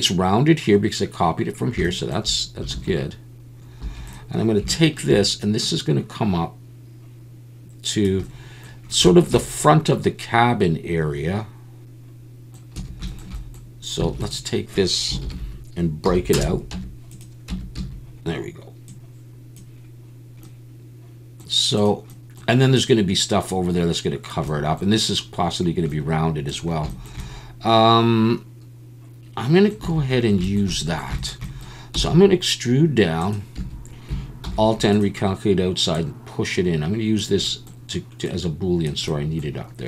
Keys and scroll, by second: 2.7 alt+a, 3.8 2, 12.8 a, 14.1 alt+a, 15.2 ctrl+l, 16.1 p, 16.7 Tab, 17.5 Tab, 17.8 a, 29.8 a, 31.9 e, 33.6 a, 34.4 alt+n.